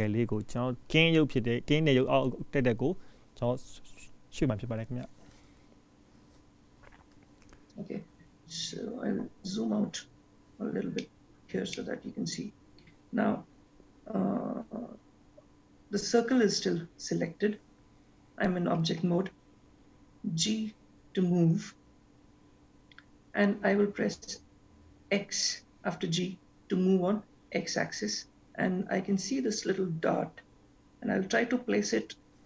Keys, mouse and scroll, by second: 3.2 shift+middle click, 8.6-11.1 scroll down 5, 11.1 middle click, 20.7 g.